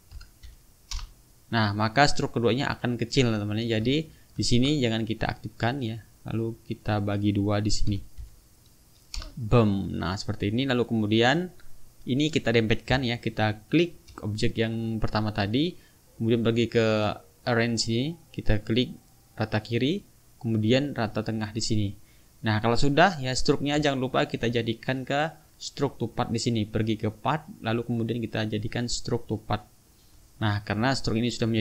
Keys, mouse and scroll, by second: 0.2 KP_Divide, 0.5 KP_2, 0.9 Return, 2.1-3.7 drag, 3.9 ctrl+z, 5.6 click, 6.9 click, 7.9 KP_Divide, 8.2 KP_2, 9.2 Return, 10.7-11.3 drag, 13.7 shift+click, 17.4 click, 19.7 click, 21.1 click, 21.8 click, 23.4 click, 24.2 shift+click, 27.2 click, 29.4 click, 30.9 click, 31.4 click.